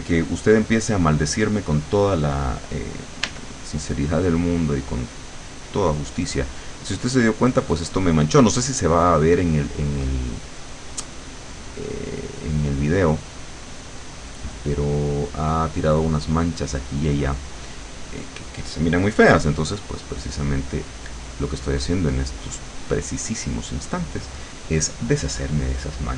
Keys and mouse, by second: 3.3 e, 4.2-10.5 drag, 11.3-13.1 drag, 13.5-16.1 drag, 19.7-23.8 drag.